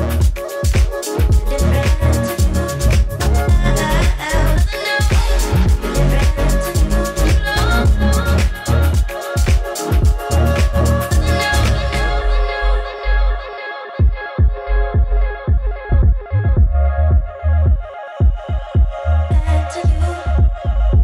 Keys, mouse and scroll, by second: 5.8-7.3 typing, 9.8-13.2 drag, 14.0 4, 14.3 Return, 16.4 click, 19.4 click.